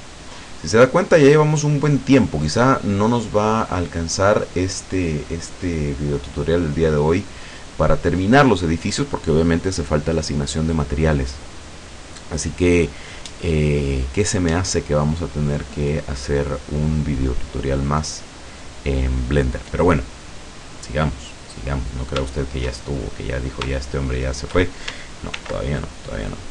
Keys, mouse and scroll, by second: 0.5-4.2 middle drag, 21.6-22.1 scroll up 1, 22.9-24.7 shift+middle drag, 25.4 ctrl+r, 26.3-26.5 scroll up 2.